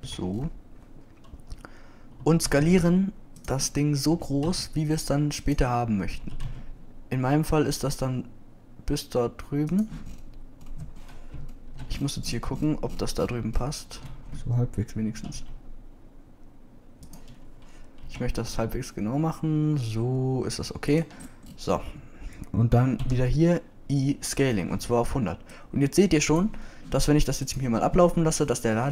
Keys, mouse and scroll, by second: 1.2 Left, 3.4 s, 5.3 s, 7.3 s, 16.2 s, 19.0 b, 22.5 typing, 24.1 i.